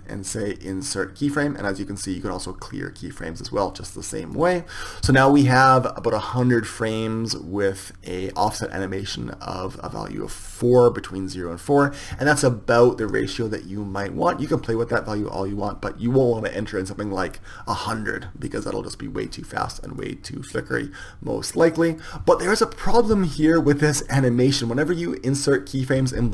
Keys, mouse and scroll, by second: 7.1-9.0 drag, 12.0-20.2 drag, 21.1-22.6 drag.